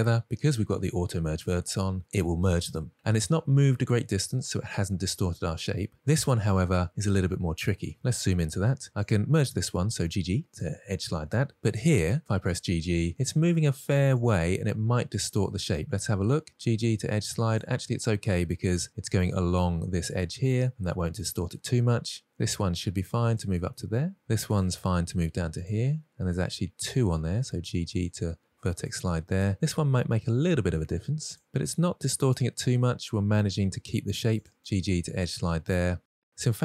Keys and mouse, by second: 5.6 middle click, 8.6 shift+middle click, 9.6 click, 10.4 g, 10.6 g, 11.1 click, 12.2 click, 12.8 g, 13.0 g, 15.8 middle click, 16.8 g, 16.9 g, 21.3 middle click, 22.5 click, 22.8 g, 22.9 g, 23.8-24.2 middle drag, 25.1 click, 25.4 g, 25.5 g, 26.2 click, 27.5 click, 27.8 g, 28.0 g, 28.6-29.5 drag, 30.1 middle click, 30.7 g, 30.8 g, 33.0-33.5 middle drag, 34.6 g, 34.7 g, 35.9-36.6 middle drag.